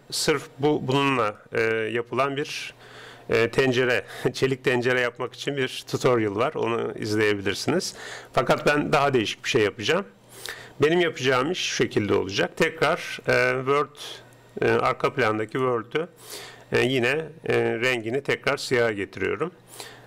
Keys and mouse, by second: 1.4-2.9 middle drag, 5.4-7.4 middle drag, 15.5-17.4 drag, 17.9-19.7 drag.